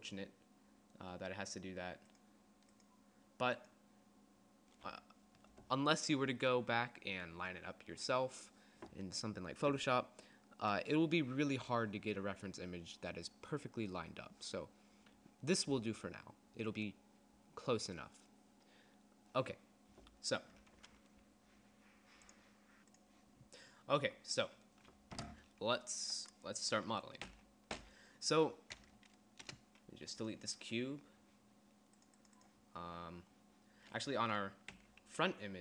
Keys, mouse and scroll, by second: 27.5 n, 28.0 n, 29.7 Delete, 35.0 n.